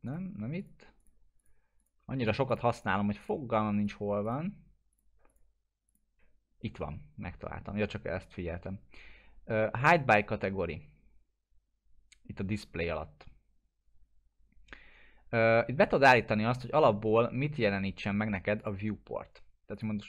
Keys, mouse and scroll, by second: 18.6 click.